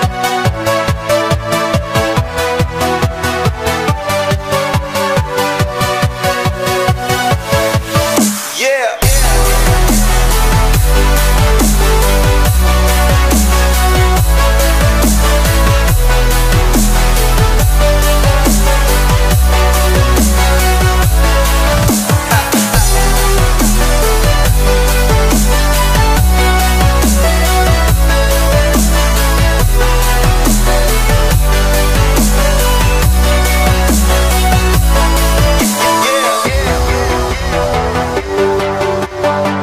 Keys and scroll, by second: 33.2 ctrl+space, 37.2 ctrl+shift+x, 38.7 ctrl+shift+x.